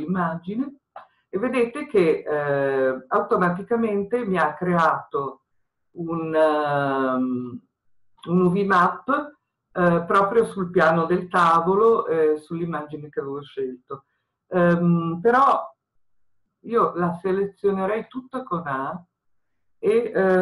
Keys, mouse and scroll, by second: 18.1 a.